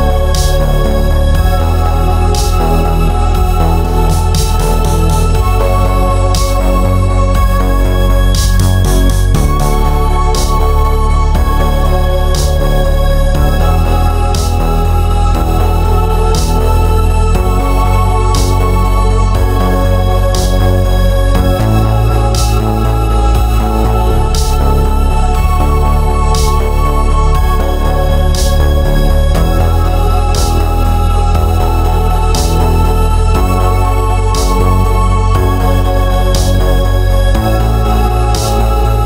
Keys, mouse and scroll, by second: 0.5 ctrl+r, 2.4 click, 2.5-10.7 middle drag, 3.2 ctrl+z, 4.6-5.3 scroll up 1, 5.7-6.2 scroll down 1, 10.7 click, 11.7 click, 13.1 click, 13.5 click, 13.9 click, 14.8 click, 15.1-20.1 middle drag, 15.7 scroll up 1, 20.1 click, 21.3-22.3 drag, 22.3 right click, 22.6-32.6 drag, 24.3 Return, 25.8 Return, 27.3 Return, 29.0 Escape, 29.5 KP_3, 30.9 KP_Decimal, 31.7 shift+z, 33.3 ctrl+z, 33.6-35.4 drag, 36.0 g, 37.0 click, 37.7 g.